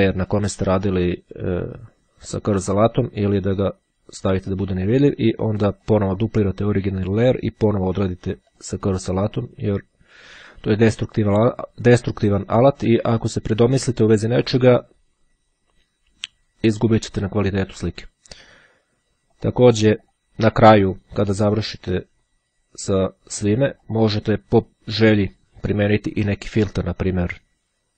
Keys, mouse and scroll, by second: 4.7 click, 5.9 click, 6.9 click, 8.7 click, 17.5-18.7 drag, 19.5 click, 23.8 click, 27.2 click.